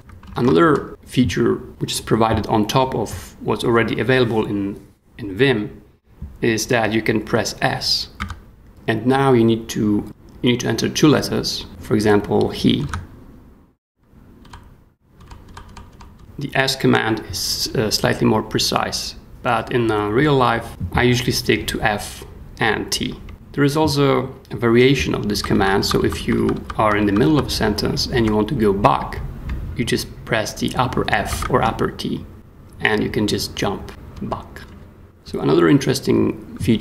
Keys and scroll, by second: 0.3 shift+i, 0.6 shift+Escape, 8.2 s, 12.5-13.3 typing, 14.4 ;, 15.2 ;, 15.9 ;, 25.3-28.1 typing, 31.3 shift+f, 32.3 h, 33.9 ;, 34.6 ,, 35.0 super+4.